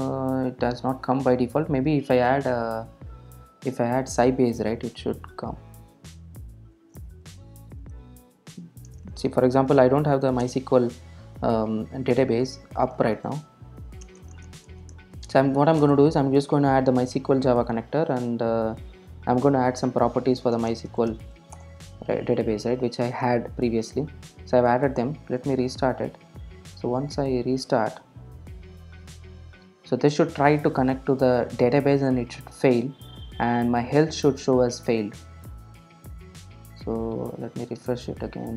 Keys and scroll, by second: 10.5 Return, 11.3 Return, 16.0 Return, 17.8 super+s, 19.9 super+s, 21.6 Return, 24.2 super+r, 36.4 super+F2, 36.9 super+r.